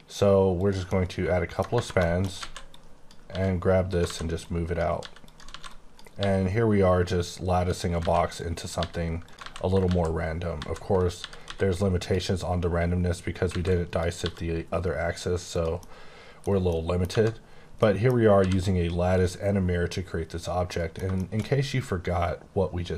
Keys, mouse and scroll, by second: 0.6 click, 0.8 middle click, 1.7 Tab, 1.9 shift+middle click, 2.4 alt+a, 2.7 click, 3.2 g, 3.9 click, 4.0 alt+a, 4.4 click, 4.9 g, 5.2 click, 5.5 alt+a, 5.7 click, 6.1 g, 7.5 click, 8.0 alt+a, 8.3 click, 8.7 g, 9.2 click, 9.4 alt+a, 9.8 ctrl+z, 10.5 ctrl+z, 11.1-11.4 typing, 12.0 click, 13.4 alt+a, 13.7 click, 14.2 g, 15.5 click, 15.7 middle click, 16.6 middle click, 17.1 Tab, 17.7 middle click, 18.3 h, 19.1 click, 19.9-20.7 scroll down 1, 20.7 middle click.